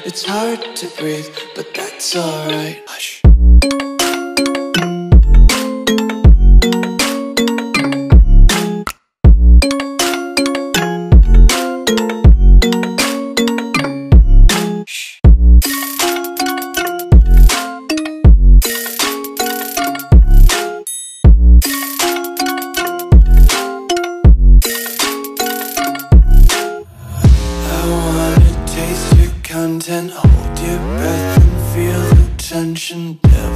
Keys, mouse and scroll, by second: 1.5 t, 2.2 alt+click, 4.0 Return, 5.8-6.6 typing, 14.8 click, 24.5 click, 26.1 t, 26.1 alt+click, 30.2 Return, 31.5 s.